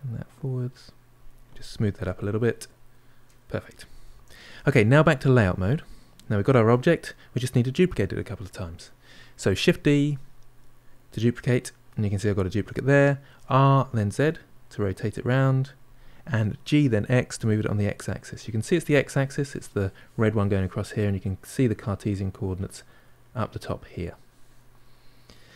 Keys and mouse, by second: 0.5-2.0 shift+drag, 2.0-5.2 ctrl+middle drag, 5.2 click, 5.8-9.6 middle drag, 9.6 shift+d, 16.7 g, 20.8-25.5 middle drag.